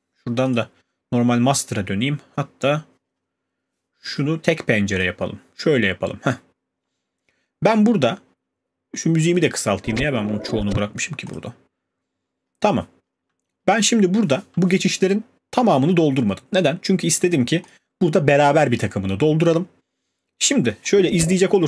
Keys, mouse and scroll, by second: 0.5 click, 10.9 click, 11.3 click, 13.4-13.8 alt+scroll, 17.7 click.